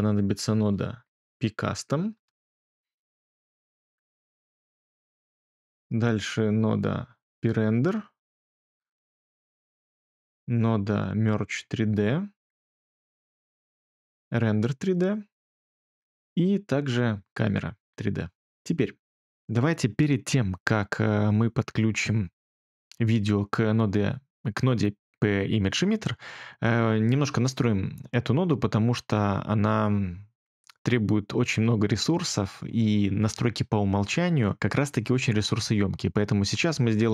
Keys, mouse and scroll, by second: 0.7-1.8 typing, 2.1 Return, 3.6-4.2 typing, 6.0 typing.